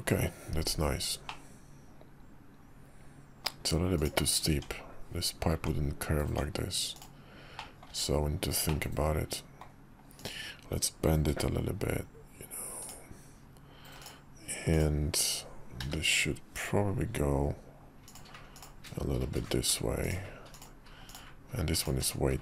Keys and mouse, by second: 1.3-3.5 middle drag, 4.0-4.5 drag, 4.5 Tab, 5.5 Tab, 6.2 Tab, 7.6 middle click, 7.9 `, 8.7 middle click, 11.3 g, 14.0 click, 15.8 g, 19.3 g, 21.1-22.4 drag.